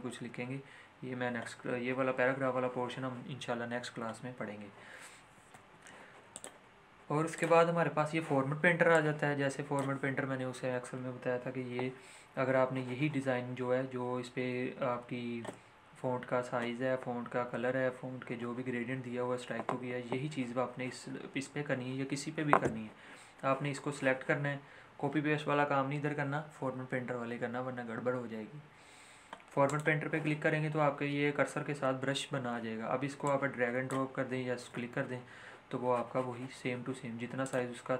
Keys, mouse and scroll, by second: 5.5 ctrl+z, 6.3-14.1 drag, 29.6 click, 33.2-36.3 drag, 37.4 click.